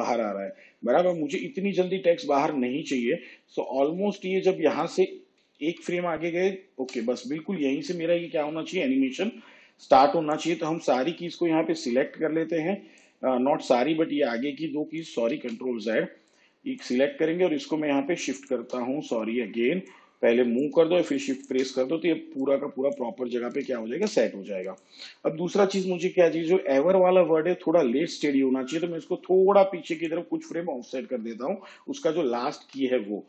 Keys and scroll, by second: 5.7 ctrl+Right, 15.4 ctrl+z.